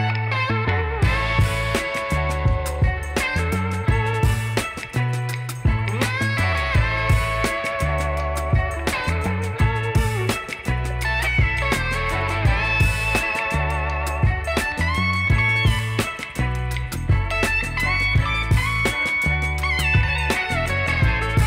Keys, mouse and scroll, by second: 0.4 alt+click, 2.8 alt+click, 3.7 middle click, 4.3 alt+click, 5.9 middle click, 6.6 alt+click, 7.8 alt+click, 8.9 alt+click, 9.5 alt+click, 10.7 alt+click, 11.4 alt+click, 12.6 alt+click, 13.3 alt+middle click, 13.8 alt+scroll down 1, 14.0 alt+middle click, 16.5 Delete.